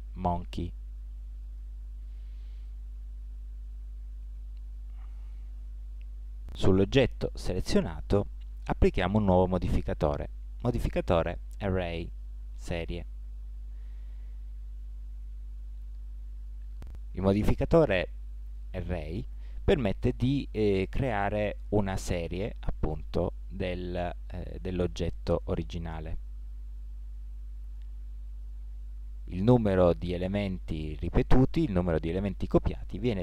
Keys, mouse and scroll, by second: 2.7-4.5 middle drag, 9.1-12.3 drag, 14.4-17.7 middle drag, 21.8-23.6 drag, 26.0-27.9 middle drag, 31.0-33.2 drag.